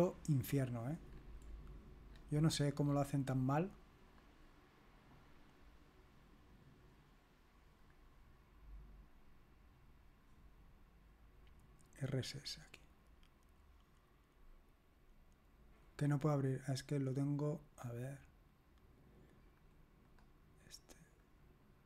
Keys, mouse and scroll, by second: 0.4-2.0 scroll down 2, 2.0 scroll down 1, 2.2-4.1 scroll up 3, 4.1 click, 4.4 click, 7.8 click, 13.0 click, 13.7 click, 16.0 click, 19.6 click, 20.1 click, 21.2 click.